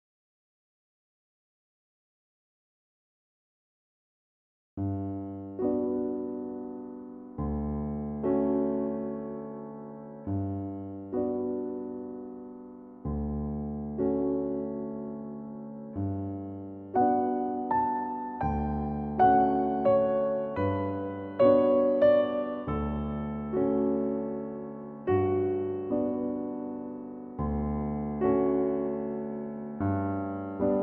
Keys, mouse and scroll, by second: 0.1 click, 0.6 click, 2.6-3.4 shift+middle drag, 3.4 scroll up 2, 3.9-6.6 middle drag, 6.6 click, 7.1 click, 8.9-9.7 middle drag, 9.7-10.1 scroll down 2, 10.1-12.0 shift+middle drag, 12.0-15.0 drag, 15.0-17.9 middle drag, 17.9 s, 19.9-22.9 middle drag, 25.4-26.2 scroll down 1, 26.2-26.6 scroll up 1, 26.6-27.3 scroll down 2, 27.3-28.4 scroll down 1, 28.4 KP_1, 29.1-30.3 shift+middle drag, 30.3 shift+d.